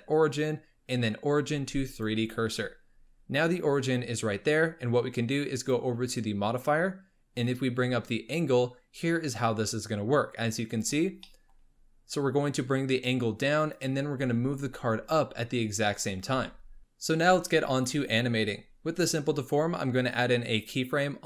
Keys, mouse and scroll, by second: 5.5 click, 7.4-10.5 drag, 11.1 scroll down 2, 11.3-12.5 middle drag, 12.5-14.2 drag, 14.2 g, 16.3 ctrl+z, 20.5 click.